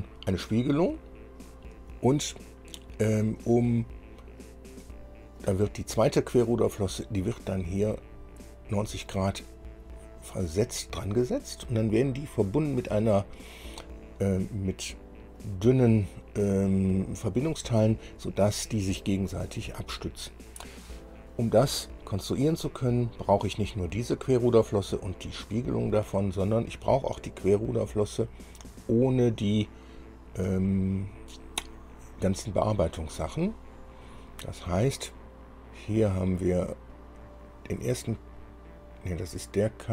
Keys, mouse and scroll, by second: 24.7 click.